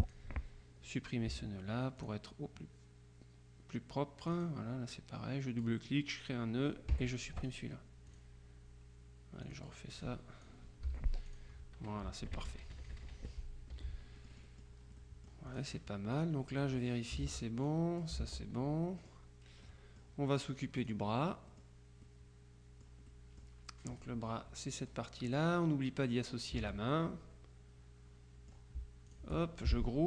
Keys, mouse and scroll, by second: 1.4 Delete, 2.0 click, 4.3 click, 7.0 Delete, 7.5 click, 9.5 click, 11.0 Delete, 11.4 click, 11.5 t, 12.1 KP_Subtract, 13.8 F1, 14.2 click, 15.6 click, 16.2 click, 17.3 ctrl+z, 17.8 ctrl+click, 18.3 ctrl+z, 19.1 click, 19.4 middle click, 19.8 middle click, 20.9 click, 22.0 middle click, 23.2 middle click, 24.1-25.8 drag, 26.7 ctrl+z, 27.0-29.1 ctrl+drag, 29.2 shift+click.